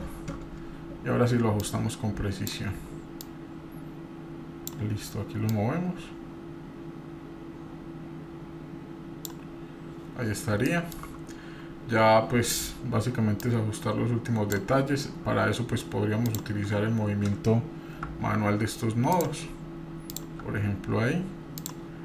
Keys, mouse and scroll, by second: 0.1-0.5 scroll up 4, 1.6 scroll up 1, 1.6 click, 3.2-4.8 drag, 5.5-9.3 drag, 10.3 scroll up 2, 10.6 shift+middle click, 13.4-14.6 drag, 16.2 click, 18.0 g, 20.1 click, 20.4 g.